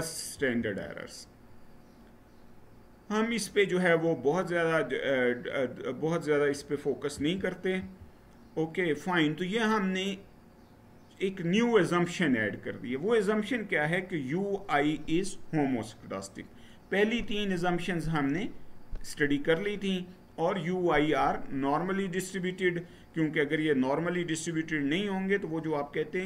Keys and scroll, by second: 0.1 Right, 6.9 Right, 7.5 Right.